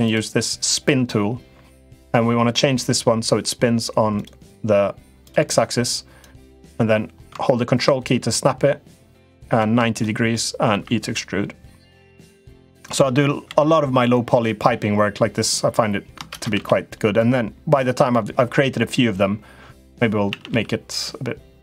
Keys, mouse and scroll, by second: 3.9 click, 5.0 click, 6.0-9.5 drag, 9.9 middle click, 10.5 e, 12.2 middle click, 12.7 click, 13.2 l, 15.1 click, 16.0 shift+space, 17.1 click, 18.0 middle click, 20.0 a, 20.2 g.